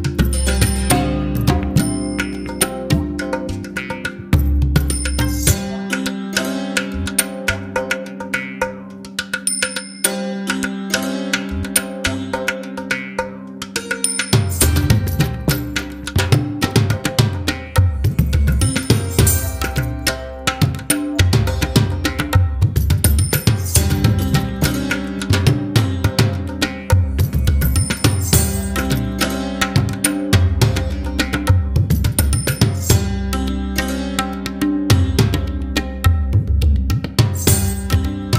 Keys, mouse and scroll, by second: 0.2-3.2 scroll down 1, 5.2-8.5 drag, 32.9-35.9 middle drag.